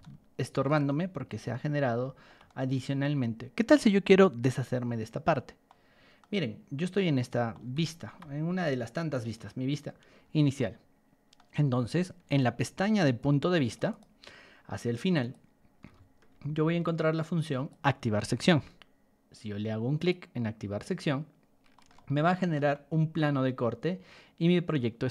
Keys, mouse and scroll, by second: 0.0-0.6 shift+middle drag, 0.8-2.2 middle drag, 2.4-3.7 middle drag, 5.6 middle click, 7.5 shift+middle click, 8.9 click, 9.9 scroll down 2, 10.5-11.3 middle drag, 12.2 ctrl+1, 12.6 click, 13.1 ctrl+click, 13.8 right click, 15.2 click, 15.8 b, 16.8 ctrl+click, 18.4 Escape, 19.9 click, 21.7 middle click, 21.9 shift+middle click, 22.7-25.1 shift+middle drag.